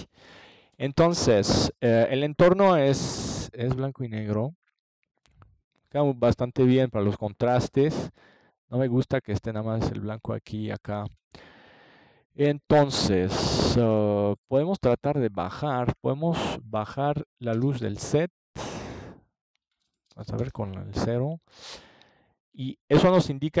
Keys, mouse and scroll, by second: 6.9-9.1 middle drag, 11.1 click, 11.6-12.8 middle drag, 12.9-14.5 middle drag, 17.1 click, 18.0 KP_0, 20.7 middle click, 21.9-23.6 drag.